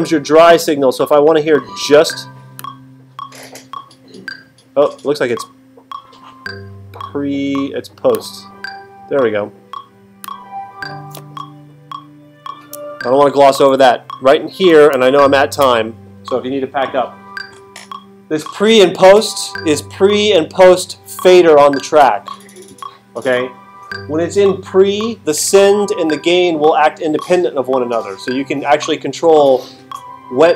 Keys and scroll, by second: 14.9 alt+super+8.